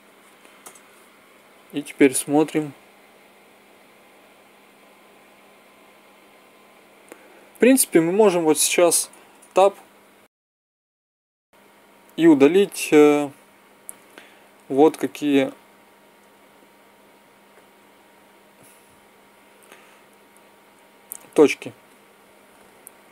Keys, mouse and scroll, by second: 2.3 Right, 2.6 Right, 4.8 Right, 5.5 Right, 6.2 Right, 6.8 Right, 7.7 Right, 9.4 Tab, 12.8 middle click, 13.3 z, 21.3 c.